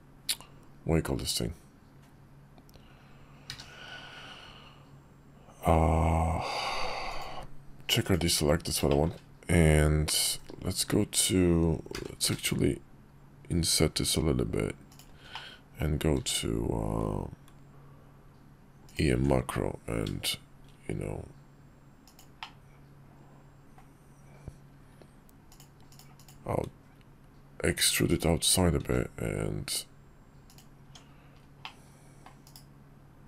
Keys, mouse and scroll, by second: 3.2 q, 6.9 click, 8.7 shift+middle click, 11.7 i, 15.1 middle click, 15.9 q, 22.1-23.5 middle drag, 25.9-27.9 drag, 28.5 s, 30.5 Tab, 31.4 middle click, 32.2 /, 33.0 click.